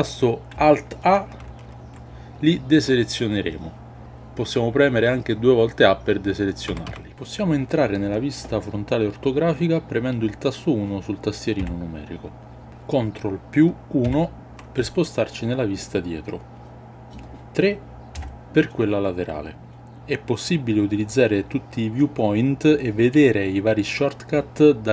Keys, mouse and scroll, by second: 1.9 alt+a, 7.4 a, 11.6 KP_1, 14.0 ctrl+KP_1, 18.1 KP_3.